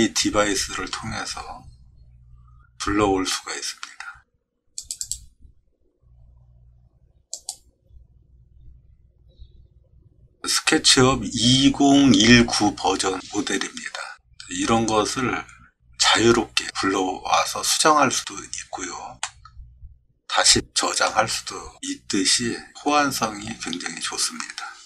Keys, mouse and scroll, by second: 4.8 click, 5.0 click, 7.3 click, 19.2-21.0 middle drag.